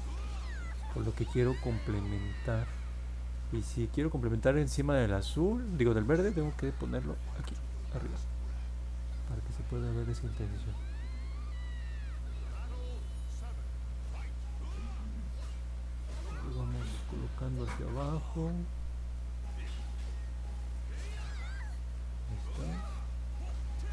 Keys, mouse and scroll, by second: 0.5 click, 1.1 click, 1.4 click, 1.7 click, 2.3 click, 2.6 click, 2.9 click, 4.1 click, 6.7 click, 10.8 click, 11.1 click, 11.4 click, 12.2 click, 12.5 click, 13.0 click, 13.6 click, 13.9 click, 14.5 click, 15.3 click, 15.8 click, 16.1 click, 17.8 click, 18.4 click, 19.0 click, 19.5 click, 21.0 click, 21.7 click, 22.1 click.